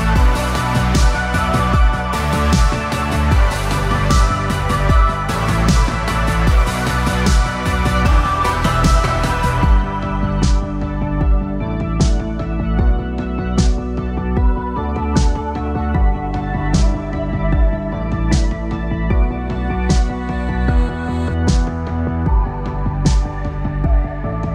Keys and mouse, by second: 0.4 KP_3, 3.9 c, 6.7 g, 9.4 a, 11.4 a, 12.0 a, 13.0 c, 16.6 c, 19.3 g, 22.3 a, 22.9 a, 23.6 a.